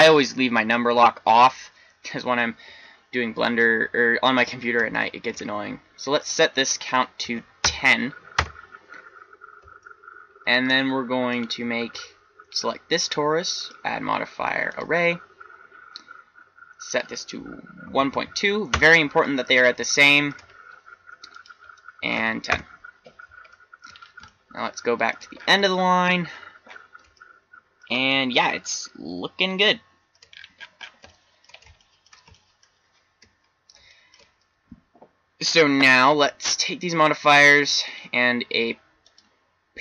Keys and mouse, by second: 6.1 click, 15.4-16.8 middle drag, 21.2-23.7 middle drag, 26.4-27.5 middle drag, 27.7 middle click, 36.4-38.0 drag.